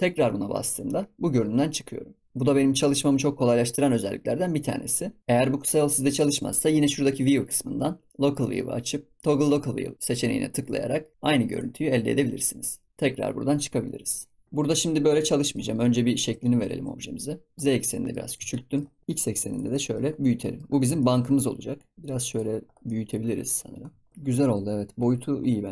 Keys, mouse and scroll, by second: 0.6 KP_Divide, 7.1-9.9 drag, 12.2 scroll down 2, 13.4 KP_Divide, 15.0 scroll down 2, 15.2-15.6 middle drag, 15.6 scroll up 5, 15.9 shift+middle click, 16.6 s, 17.8-18.2 middle drag, 18.2 scroll down 2, 18.5 shift+middle click, 19.2 s, 19.8 scroll down 1, 19.8 middle click, 20.0 scroll up 1, 20.0 scroll down 2, 20.3-20.6 middle drag, 20.6-21.0 scroll up 5, 21.0-21.3 shift+middle drag, 21.3-21.7 scroll up 1, 21.7 scroll down 4, 21.9 s, 22.8 middle click, 23.2 scroll up 6, 23.4 scroll down 3, 24.1 scroll down 6, 24.1 shift+middle click, 24.9 KP_Decimal.